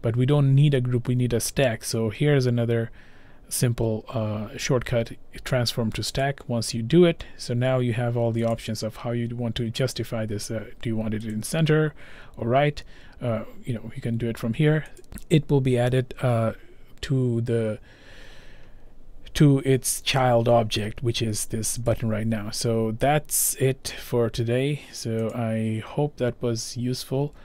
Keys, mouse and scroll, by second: 6.3 click, 8.5 click, 15.0 click, 15.8 click, 21.9 click, 25.3 click.